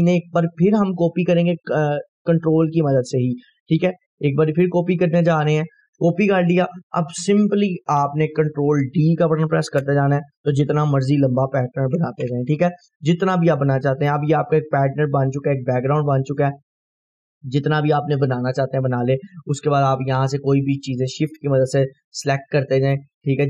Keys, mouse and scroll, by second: 1.5-5.8 ctrl+drag, 5.5 ctrl+right click, 6.4-8.2 scroll down 2, 12.1 ctrl+d, 12.3 F4, 13.5-15.1 drag, 15.0 Delete, 15.3 scroll down 1, 16.0-16.6 drag, 17.8 scroll up 1, 18.3-18.9 click, 21.4 shift+click.